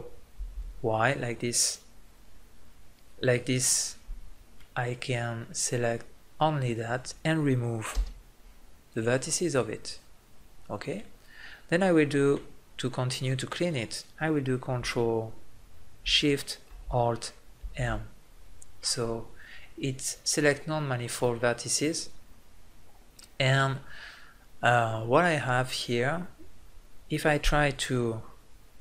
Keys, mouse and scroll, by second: 0.7 ctrl+i, 8.0 Delete, 17.9 ctrl+alt+shift+m, 23.7-28.8 middle drag.